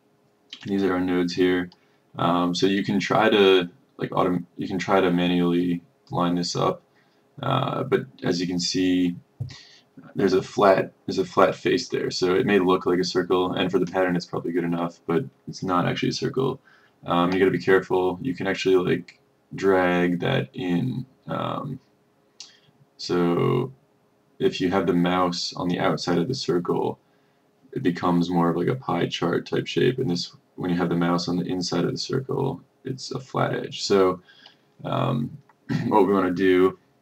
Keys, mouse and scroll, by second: 0.8-21.8 drag, 22.2-37.0 drag.